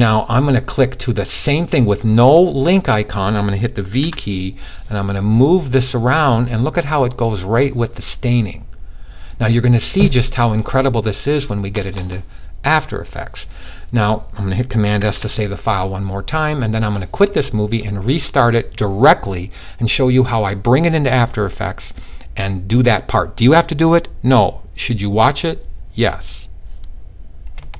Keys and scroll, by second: 3.4 v, 14.4 super+s.